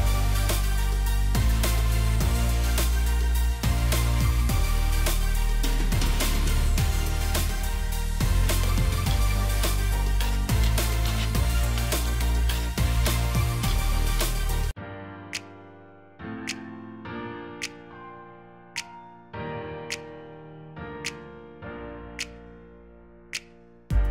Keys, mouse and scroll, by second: 2.9 ctrl+z, 13.3 shift+click, 17.7 alt+shift+click, 20.7 shift+click.